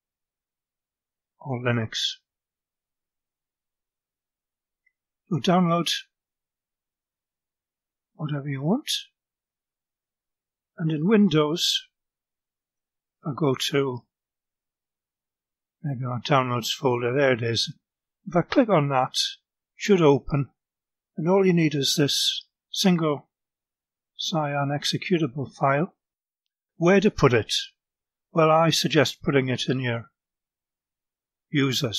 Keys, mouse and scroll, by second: 8.2-9.7 drag, 10.9 click, 13.1 click, 14.1 q, 14.1 click, 16.1 click, 19.0 click, 20.5 click, 22.3-24.6 drag, 27.3 click, 28.3 scroll down 1, 28.9 click, 30.3 click.